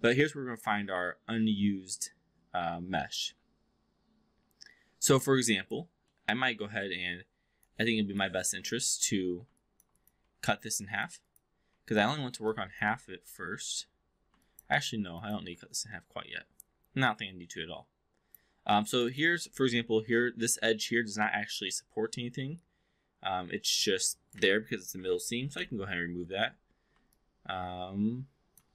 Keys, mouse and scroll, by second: 0.8-2.2 alt+middle drag, 3.2-5.7 alt+drag, 6.0-6.5 alt+middle drag, 8.8 click, 9.6 alt+drag, 10.0 click, 10.2 4, 10.8 click, 11.3 click, 11.6 4, 11.8 click, 12.5 alt+click, 12.9 3, 13.3 4, 14.4 alt+click, 14.7 2, 15.8-18.3 alt+drag, 19.1 click, 19.5-24.4 alt+drag, 25.5 ctrl+BackSpace, 27.1-28.6 alt+drag.